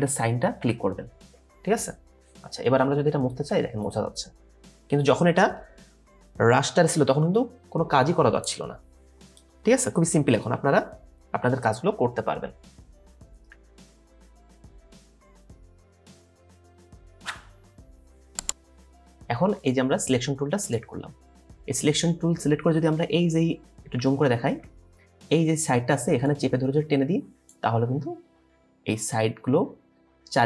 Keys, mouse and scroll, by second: 0.0-0.6 typing, 8.7 typing, 13.5 Delete, 14.7 right click, 20.2 right click, 24.2-24.7 alt+scroll up 1.